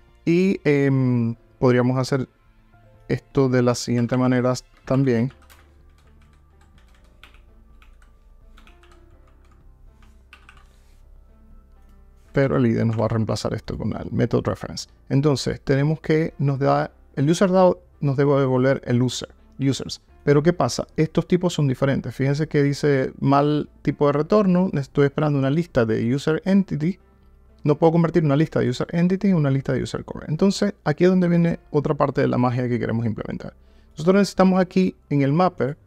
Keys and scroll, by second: 12.4 alt+Return.